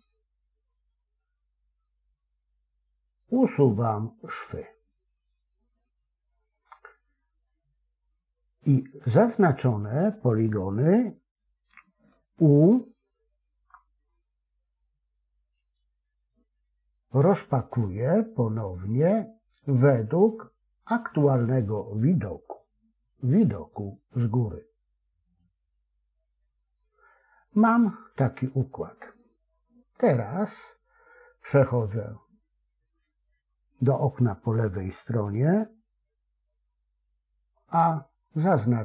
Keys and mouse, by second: 13.5 u, 37.5 a.